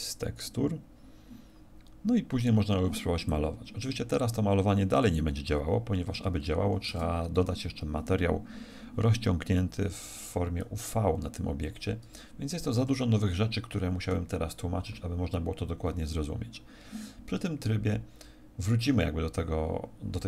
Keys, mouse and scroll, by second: 3.2 click, 6.9 Tab, 12.8 Tab.